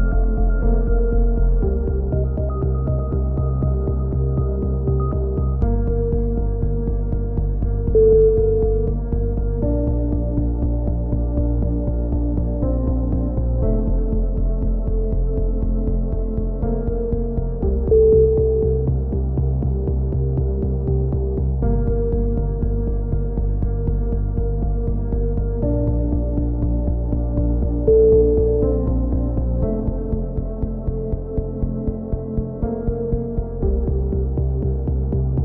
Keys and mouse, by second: 0.3-2.6 middle drag, 2.1 z, 2.6-3.6 drag, 3.7-5.2 right drag, 5.2 click, 5.2 KP_7, 5.5 z, 5.7 middle click, 6.2-7.8 drag, 9.0 c, 10.2 click, 11.8 z, 12.3 a, 12.6 middle click, 13.2 z, 13.8 z, 15.5-18.0 right drag, 17.4 z, 18.0 middle click, 18.5 click, 19.9 z, 20.1-21.1 drag, 21.4 KP_7, 21.8 z, 22.7-24.2 middle drag, 24.2 z, 24.6 z, 26.0 z, 26.4 a, 26.6 z, 27.2 middle click, 27.2 z, 28.4 z, 29.0 z, 31.4-34.6 typing, 34.7 middle click, 35.3-35.4 right drag.